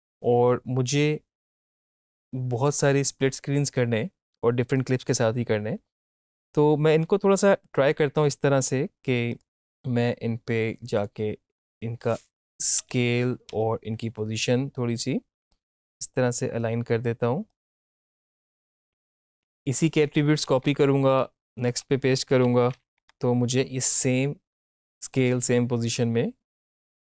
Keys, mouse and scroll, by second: 5.0-7.6 drag, 11.6 click, 15.4-19.8 drag, 20.4 ctrl+c, 21.0 click, 22.3 ctrl+alt+v, 22.9 Return.